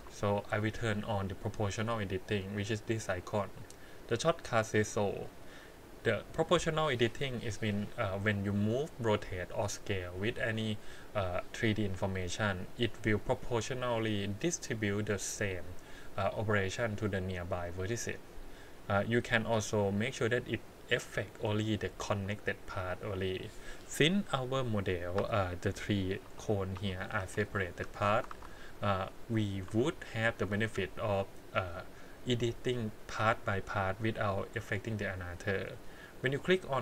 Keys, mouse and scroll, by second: 5.2 click, 6.4-9.1 drag, 25.2 3, 26.2 l, 26.8 l, 27.2 l, 27.9 click, 28.3 alt+a, 29.6 1, 30.4 click, 36.3 click.